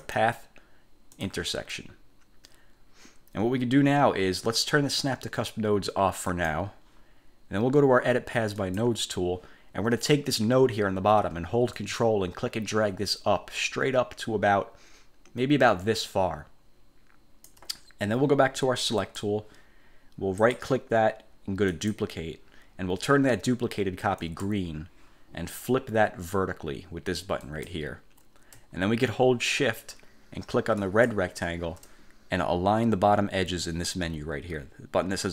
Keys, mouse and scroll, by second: 0.2 click, 1.2 click, 6.4 click, 8.7 click, 11.9-17.8 ctrl+drag, 19.1 click, 20.5 click, 21.8 click, 24.3 click, 27.6 click, 31.0 shift+click.